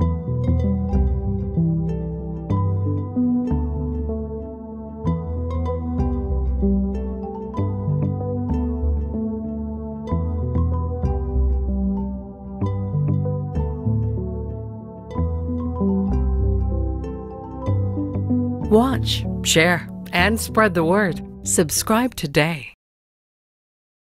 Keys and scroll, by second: 0.0-0.1 typing, 1.4 Home, 3.2 Down, 3.2 typing, 3.5 Down, 3.8 Down, 4.7 Down, 5.1 Down, 5.2 typing, 7.0 Home.